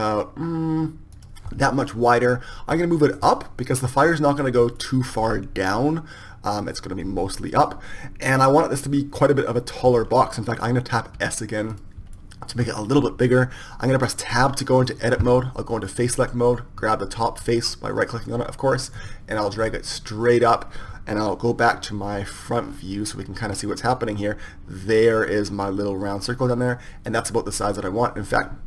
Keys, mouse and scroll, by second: 2.5-3.8 middle drag, 3.8-11.9 drag, 11.9 s, 15.2 Tab, 16.7 click, 19.8-21.9 drag, 23.1 KP_1.